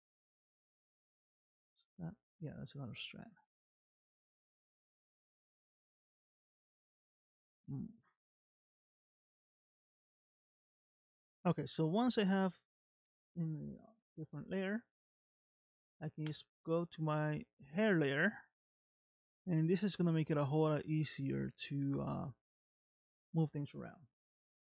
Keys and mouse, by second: 1.4-3.2 middle drag, 3.9 shift+click, 6.2 m, 8.8-11.6 middle drag, 12.6 shift+middle click, 16.3 click, 17.6-20.2 middle drag, 21.5 middle click, 23.1 shift+middle click.